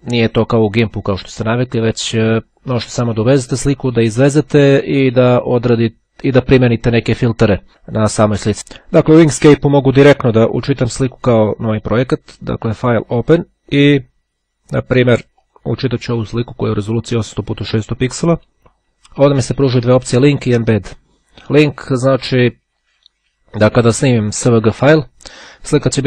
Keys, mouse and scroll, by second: 12.5 click, 13.3 click, 14.9 click.